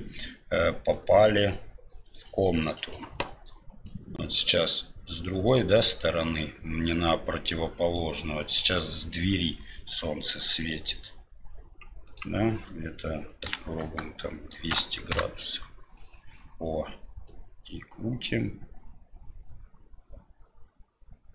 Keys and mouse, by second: 0.9 click, 3.8-5.1 drag, 6.2 click, 7.6 click, 12.2-16.0 drag, 13.6 KP_0, 17.2-21.3 drag.